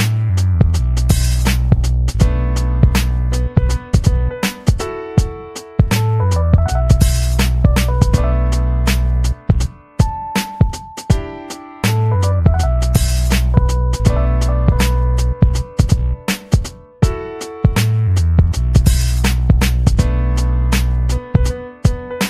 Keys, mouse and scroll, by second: 1.5 click, 2.1 ctrl+scroll down 2, 2.7-3.0 ctrl+scroll up 2, 4.5 click, 5.5 click, 9.4-9.7 scroll up 4, 11.4 click, 12.0-13.1 typing, 13.4 click, 15.8 click, 18.2 click, 18.5 click, 19.6 ctrl+z, 20.1 ctrl+z, 20.8 click, 22.1 click.